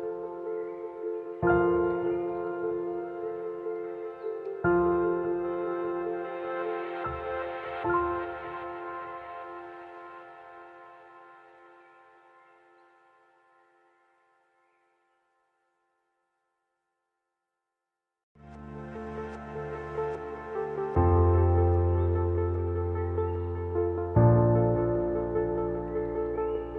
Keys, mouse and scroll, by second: 16.5 click, 16.7 alt+scroll up 1, 17.7 space, 17.7 click, 17.9 click, 18.2 space, 19.3 click, 20.5-23.5 alt+drag, 23.5-26.7 typing, 23.7 click.